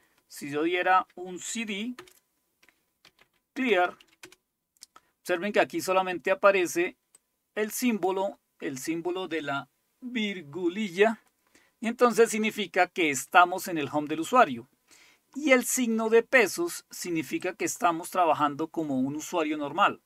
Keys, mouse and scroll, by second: 0.0-4.5 typing, 7.2 click, 11.8 click, 16.4 click, 17.5 click.